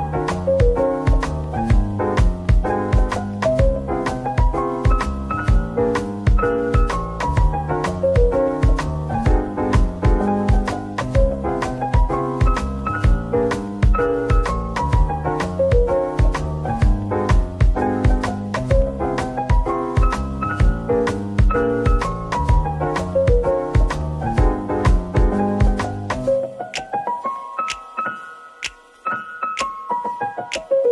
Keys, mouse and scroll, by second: 2.0 scroll down 1, 3.1 typing, 4.6 typing, 7.4 typing, 10.4 scroll up 1, 11.3 typing, 11.7 middle click, 12.3 scroll down 1, 13.3 Tab, 14.1 ctrl+r, 14.8-15.5 scroll up 1, 15.5 double click, 15.8 middle click, 17.8 typing, 19.5 scroll, 19.5 scroll up 1, 21.6 g, 22.4 right click, 25.3-25.8 typing, 27.2-27.8 typing, 29.0 middle click, 29.8-30.8 scroll down 1.